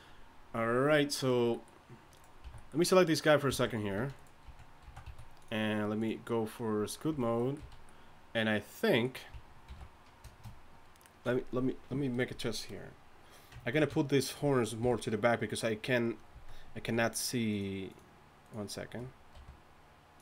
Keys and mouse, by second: 2.4 a, 3.5-5.1 typing, 7.4 z, 7.6 z, 9.7 alt+m, 14.8 KP_3, 16.3 z, 16.8 z, 19.3 r.